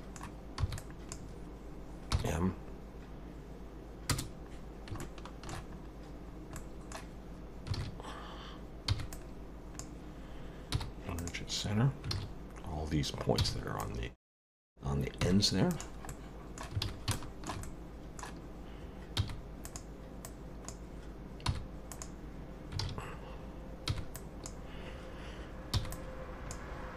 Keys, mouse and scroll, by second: 0.6 b, 2.1 m, 4.5-4.9 scroll down 2, 5.0 shift+middle click, 5.8-6.6 scroll up 2, 6.6 middle click, 7.8 alt+a, 8.9 b, 10.7 m, 12.1 alt+a, 13.4 b, 15.2 m, 16.1 middle click, 16.8 alt+a, 17.1 shift+middle click, 17.6 middle click, 19.2 b, 20.2 click, 21.5 m, 22.8 alt+a, 23.9 m, 25.7 b.